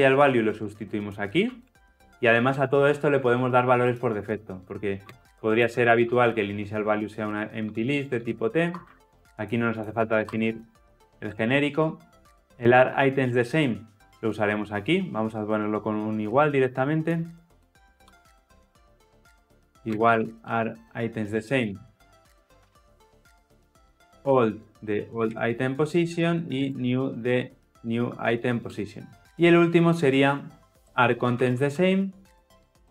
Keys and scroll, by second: 2.6 Return, 7.0 Return, 10.2 alt+Return, 21.4 Return, 23.1 Return, 24.2 Return, 25.9 Return, 29.2 ctrl+alt+o.